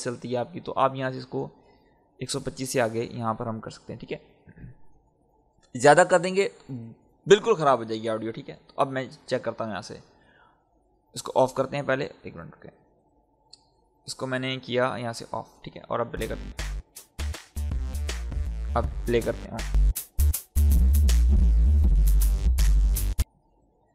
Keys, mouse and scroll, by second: 0.8-8.4 drag, 8.7-9.6 scroll down 1, 9.6-12.7 drag, 13.0-15.1 scroll down 1, 15.1 click, 16.1 space, 19.4 click, 23.1 space.